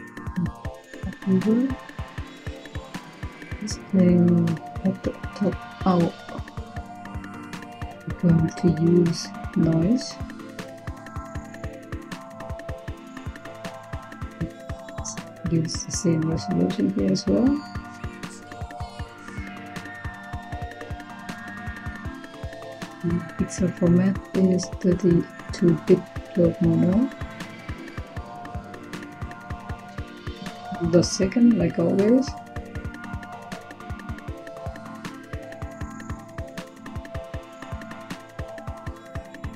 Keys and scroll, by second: 8.1 Tab, 9.0-10.3 typing, 31.6-35.8 typing, 37.1-37.8 typing.